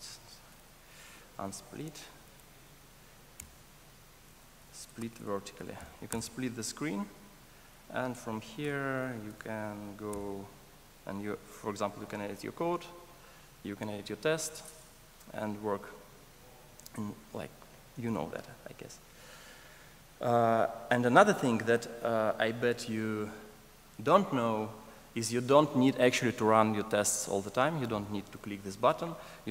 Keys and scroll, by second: 8.6 super+e.